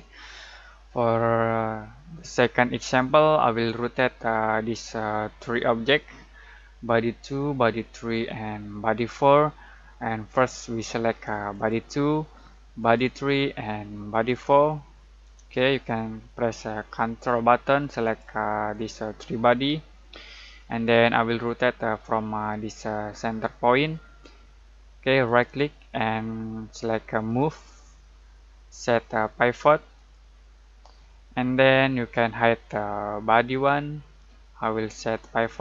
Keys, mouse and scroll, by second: 0.8-2.3 middle drag, 2.7-3.5 scroll up 1, 11.5 click, 18.0 ctrl+click, 20.8-22.6 scroll down 1, 25.2 right click, 27.2 click, 29.9 click, 33.5 click.